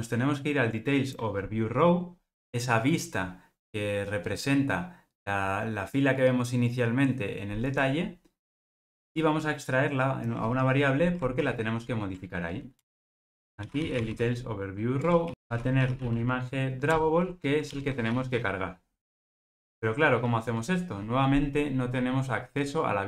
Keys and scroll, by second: 11.5 alt+super+v, 15.0 Return, 16.9 Return, 18.0 Return.